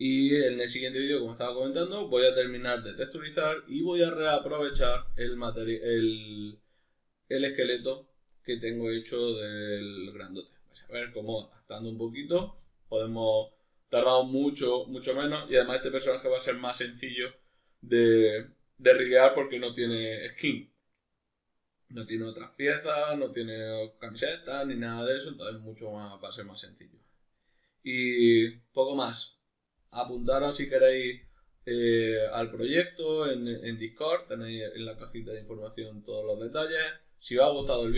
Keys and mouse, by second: 0.2-37.9 middle drag.